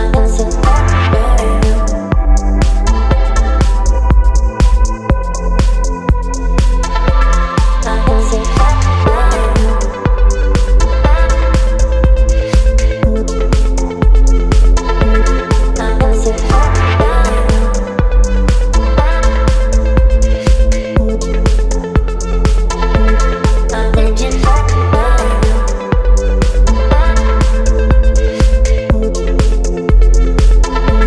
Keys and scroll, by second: 17.4 space, 20.6 space.